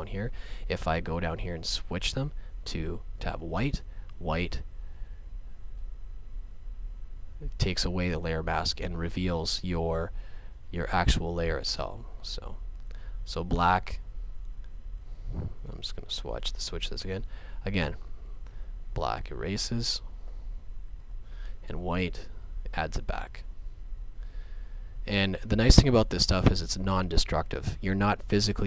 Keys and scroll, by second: 16.6 x, 21.0 x.